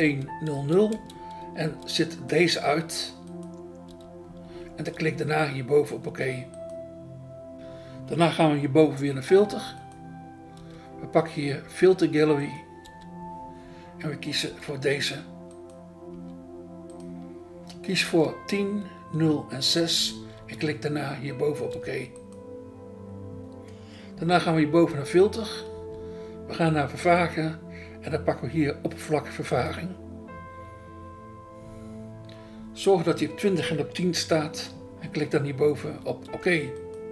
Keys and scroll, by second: 3.9 BackSpace, 10.6 BackSpace, 12.8 BackSpace, 16.1 BackSpace, 19.8 BackSpace, 21.7 BackSpace, 25.7 BackSpace, 35.8 BackSpace, 36.3 BackSpace.